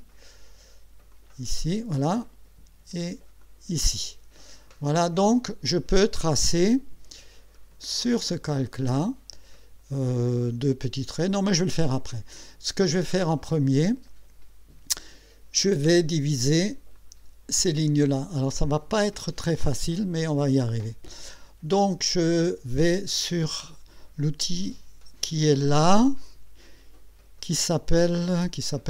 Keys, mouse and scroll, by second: 1.1 click, 3.4 click, 8.3 click, 16.9 click.